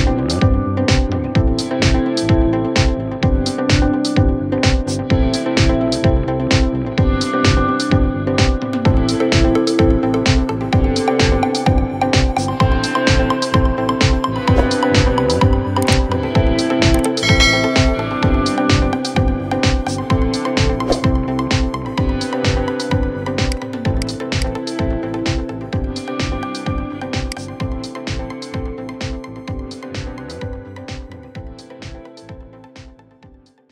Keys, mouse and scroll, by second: 0.5-1.1 scroll up 1, 1.1-2.8 shift+middle drag, 2.8-4.4 scroll up 1, 4.4-8.9 middle drag, 8.9 scroll down 1, 9.2-9.8 middle drag, 9.8-10.2 scroll up 2, 10.2-12.0 shift+middle drag, 12.0-12.5 scroll up 3, 12.8-13.3 shift+middle drag, 13.9-17.5 shift+middle drag, 17.5 scroll down 5, 18.5-22.0 shift+middle drag, 22.0 scroll down 1, 23.2-25.0 right drag, 25.0 scroll down 4, 27.0 click, 30.2-33.0 middle drag.